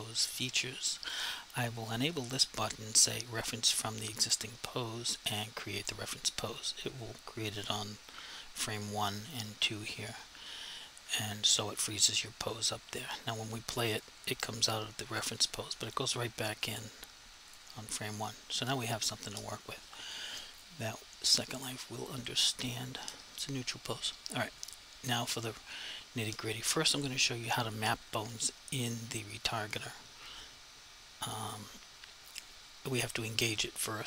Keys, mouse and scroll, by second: 0.2 click, 5.8 click, 13.1 click, 15.8 click, 20.6 click, 24.6 click, 29.4 click.